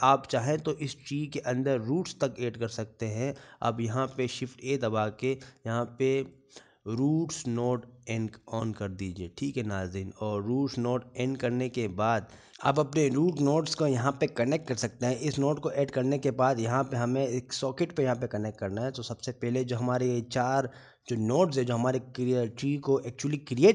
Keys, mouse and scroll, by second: 1.1 scroll up 2, 1.3 click, 2.5 scroll down 3, 2.8 shift+middle click, 3.3 scroll up 1, 4.2 scroll up 4, 12.5 click, 12.5 scroll up 4, 13.3 shift+middle click, 20.6-21.1 scroll down 7, 21.6 middle click.